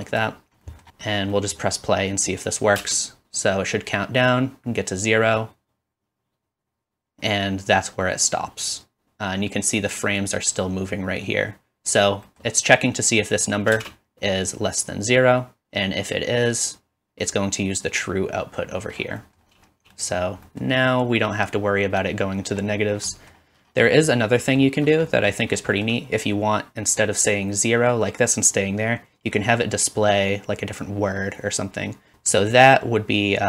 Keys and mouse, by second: 2.8 space, 13.7 space.